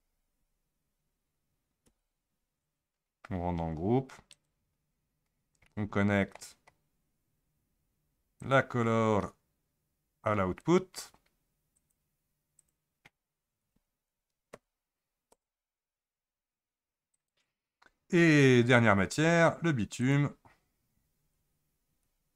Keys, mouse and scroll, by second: 0.3 KP_Subtract, 1.8 Home, 4.3 click, 5.3-5.7 scroll down 1, 5.7-6.8 middle drag, 6.8-8.4 scroll down 6, 8.4-11.4 drag, 11.8 click, 12.6-15.7 drag, 17.1 click, 18.7 Tab, 20.0 click, 20.9-21.5 scroll up 10, 22.0 Tab.